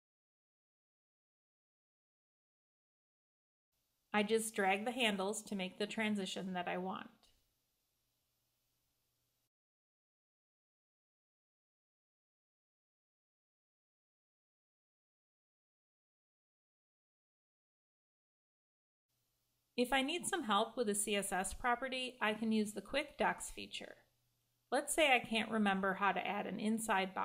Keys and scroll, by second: 18.3 Escape.